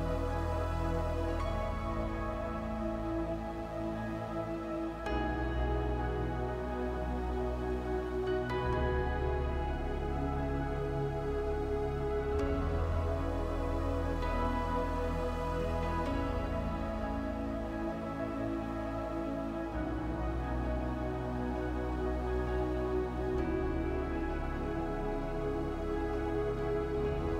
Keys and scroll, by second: 5.2 space, 15.0 space.